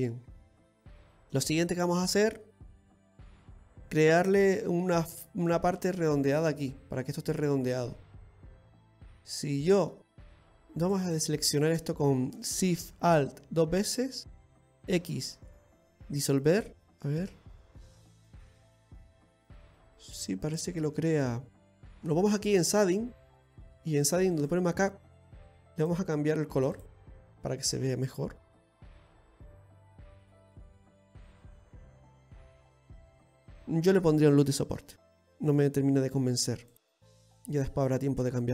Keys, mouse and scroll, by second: 0.5-1.3 scroll up 1, 1.3 middle click, 7.9 middle click, 10.4 right click, 10.8 alt+shift+right click, 14.8 x, 16.8 middle click, 17.2 Tab, 17.6 middle click, 22.4 click, 27.4 scroll down 2, 27.7 middle click, 30.2 middle click, 33.6 scroll up 2, 34.4 Tab, 34.8-35.6 scroll up 1, 35.9 ctrl+r, 37.3-37.7 scroll down 1, 37.7 middle click.